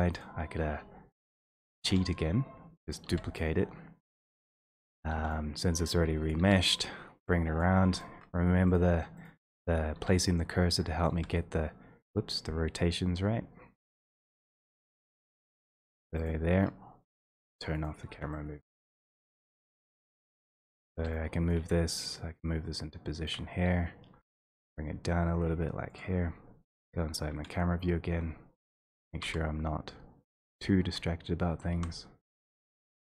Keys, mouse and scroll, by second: 8.8 alt+middle click, 9.4 alt+middle click, 10.1 w, 11.1 click, 11.2 e, 14.5 middle click, 17.9 click, 18.1 e, 19.3 right click, 19.4 e, 20.9 click, 21.0 w, 21.7 click, 23.3 shift+click, 24.1 d, 26.1 click, 28.8 click, 28.8 ., 29.2 3, 30.5 x, 31.7 g, 32.5 click, 32.8 click.